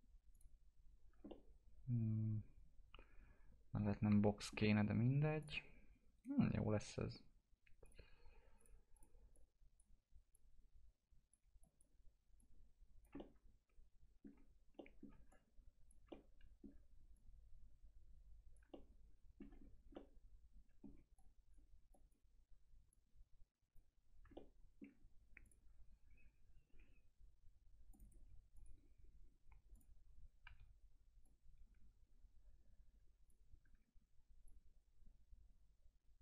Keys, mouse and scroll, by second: 1.2-5.3 alt+middle drag, 5.3 click, 6.1 right click, 7.8-11.6 drag, 11.6 click, 13.4-15.2 alt+middle drag, 15.2 click, 16.3 alt+middle click, 17.1 click, 19.0 alt+middle click, 19.6 scroll up 1, 19.9 alt+middle click, 21.1 click, 21.9-24.3 drag, 24.3 alt+middle click, 25.4 click, 27.9 click, 28.0 right click, 28.5 click, 30.4 e, 31.2-33.6 drag, 33.6 w, 34.4-36.2 drag.